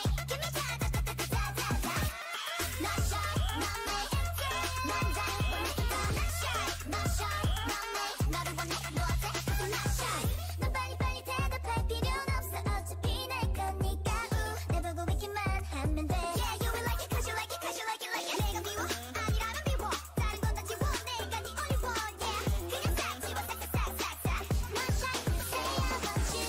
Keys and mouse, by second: 0.4 click, 0.9 click, 1.0 g, 2.6 click, 3.2 g, 4.6 a, 6.0-8.8 drag, 7.7 g, 11.3 middle click, 12.3 middle click, 13.1 right click, 13.6-15.1 middle drag, 18.5 ctrl+Tab, 19.4 ctrl+Tab, 20.3-22.7 drag, 21.1 a.